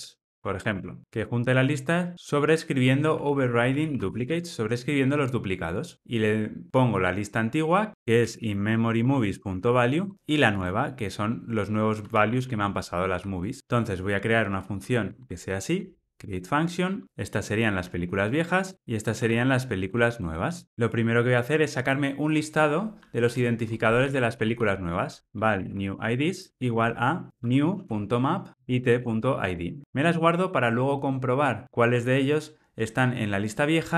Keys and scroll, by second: 7.9 super+z, 9.0 Return, 13.1 Escape, 15.0 alt+Return, 18.7 Return, 28.5 Return.